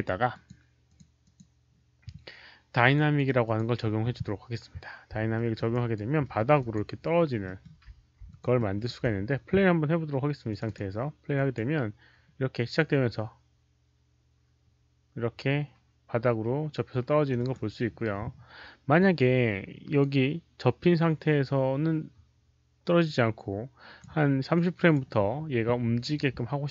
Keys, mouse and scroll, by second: 0.2 click, 0.8 click, 0.9 alt+middle click, 1.1 click, 2.7 click, 3.3 click, 5.3 alt+middle click, 5.6 alt+right click, 6.1 alt+scroll up 1, 6.2 alt+middle click, 6.3 alt+scroll down 1, 6.5 alt+click, 7.3 alt+middle click, 7.3 alt+right click, 7.5 alt+click, 7.5 alt+right click, 8.2 alt+click, 8.5 alt+middle click, 8.7 alt+right click, 10.4 alt+click, 10.4 alt+middle click, 10.4 alt+right click, 10.6 click, 11.2 alt+click, 17.3 click, 17.4 alt+middle click, 18.9-23.9 alt+drag, 18.9 alt+middle click, 24.4 click.